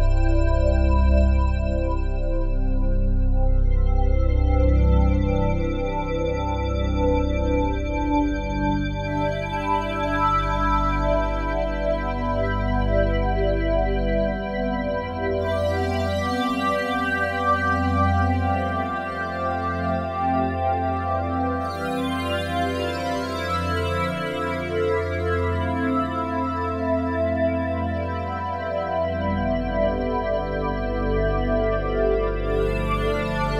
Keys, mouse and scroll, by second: 0.7 r, 2.3 click, 4.8 g, 4.9 g, 8.7 Escape, 10.4 Delete, 10.9 click, 14.7 Tab, 16.4 g, 17.6 click, 20.5 typing, 24.0 typing, 24.8 click, 26.7 typing, 28.3 shift+click, 28.9-33.5 ctrl+alt+shift+drag, 30.6 typing.